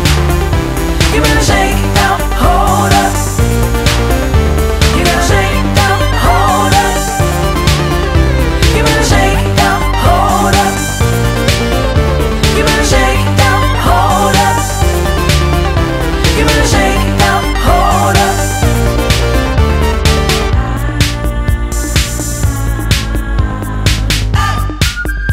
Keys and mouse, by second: 1.8 click, 2.4 click, 3.7 click, 4.7 click, 5.6 click, 8.9 click, 11.3 click, 11.4 click, 13.8 click, 17.2 click, 22.2 ctrl+d, 22.3 click, 25.1 ctrl+d.